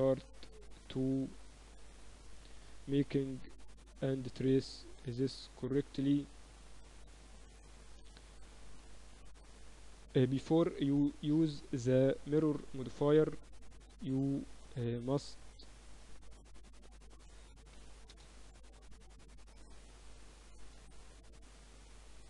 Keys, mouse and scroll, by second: 1.2 ctrl+r, 3.6-4.4 scroll up 1, 4.4-6.9 drag, 4.9-6.1 right drag, 6.9-7.9 middle drag, 7.9-9.3 right drag, 8.1-10.8 drag, 9.7 g, 14.2 a, 14.5-16.2 drag, 15.7 right click, 16.2 middle click, 16.5-17.9 drag, 17.9 s, 19.1-21.1 drag.